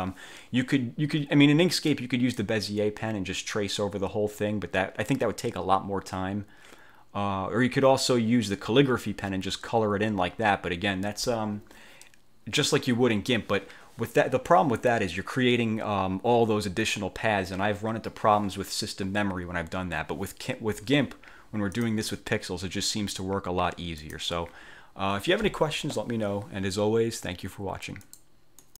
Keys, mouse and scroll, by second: 2.0 click, 21.8 click, 24.1 click, 28.1 click, 28.7 click.